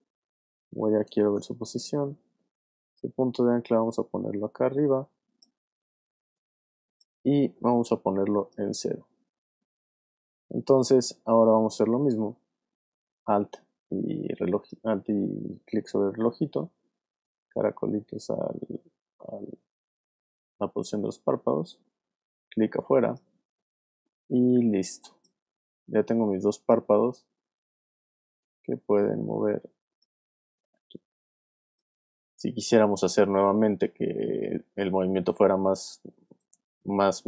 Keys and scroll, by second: 1.3 p, 26.1 space, 27.8 v, 28.5 shift+v, 32.1 shift+space, 33.0 space, 33.2 super+z.